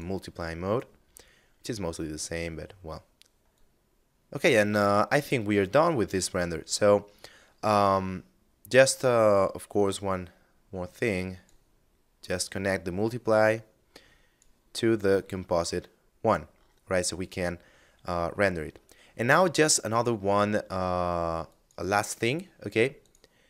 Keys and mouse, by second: 2.6 click, 4.2 middle click, 7.5 middle click, 8.9 click, 11.4 click, 14.2 click, 15.2 middle click, 18.9 shift+space, 20.6 click.